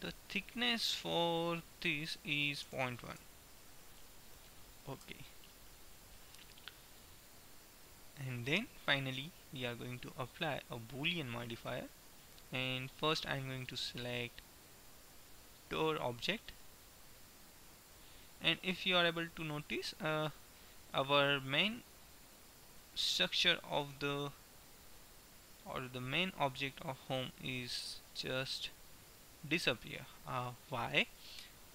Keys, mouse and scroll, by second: 0.5 middle click, 0.7-2.7 drag, 8.4-10.0 drag, 11.9-13.4 middle drag, 15.4-17.5 middle drag, 18.7 middle click, 20.7-23.4 middle drag, 23.9-25.7 middle drag, 27.9-31.5 middle drag.